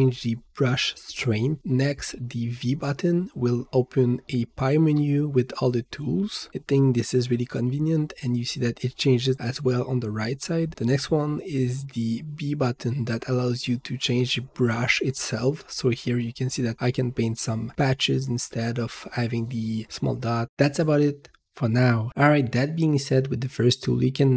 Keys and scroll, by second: 3.5 v, 9.4 v, 11.9 b, 17.4 b, 21.9 h.